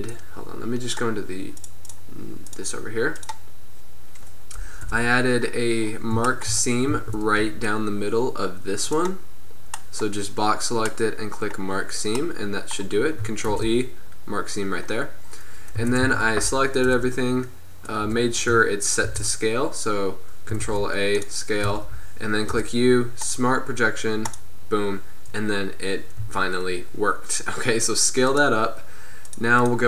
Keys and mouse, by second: 4.9 KP_7, 7.0 a, 7.5 b, 13.6 ctrl+e, 15.8 a, 16.1 a, 17.0 u, 18.1 Tab, 19.1 ctrl+a, 20.7 ctrl+a, 21.7 Tab, 22.6 u, 26.3 s, 29.4-29.8 drag.